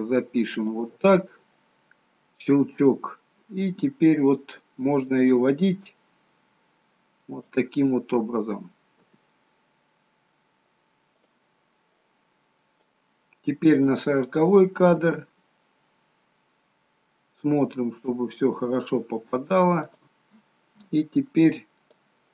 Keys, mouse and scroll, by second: 2.6-3.0 scroll down 4, 4.2 scroll up 2, 5.2 g, 12.9 click, 15.0 g, 22.0 click.